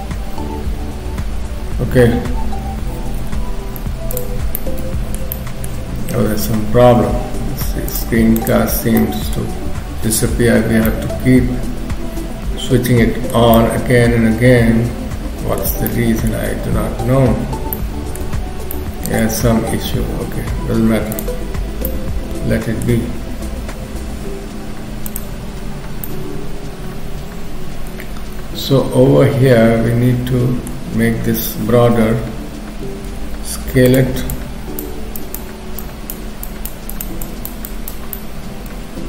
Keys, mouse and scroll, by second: 9.0 middle click, 10.9 middle click, 26.0 middle click, 32.1 k, 33.0 f, 34.3 click, 35.2 click, 36.4 click, 36.9 click, 37.7 click, 38.2 middle click.